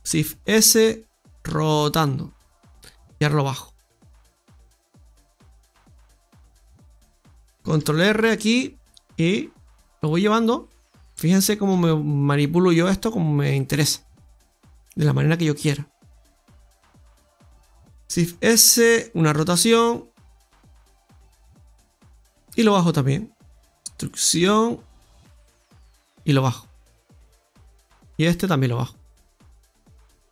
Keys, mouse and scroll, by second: 0.0 shift+s, 1.4 r, 3.5 click, 5.1 click, 7.7 ctrl+r, 9.1 click, 10.5 right click, 15.4 right click, 16.0 alt+shift+right click, 17.9 shift+s, 19.3 r, 22.5 click, 23.5 shift+middle click, 23.5 KP_1, 24.3 e, 26.2 click, 28.2 right click, 30.0 middle click.